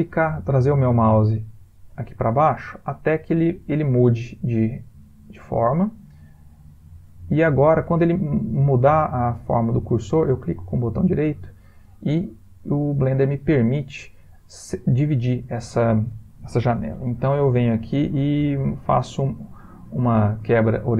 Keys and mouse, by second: 11.0 right click.